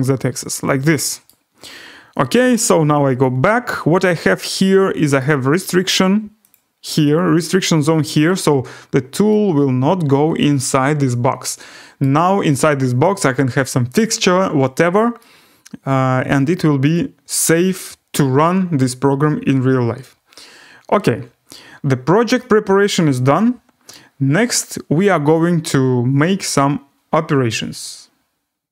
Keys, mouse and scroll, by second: 1.2 right click, 3.2 click, 4.3 scroll, 5.2 right click, 6.5 click, 7.1 click, 7.4 click, 9.3 right click, 12.0 right click, 12.2-12.5 scroll, 13.2 right click, 14.0-15.2 scroll, 16.3 right click, 17.3 right click, 17.6 scroll, 22.7 middle click, 23.9 right click, 24.2 scroll, 26.5 click, 28.3 scroll.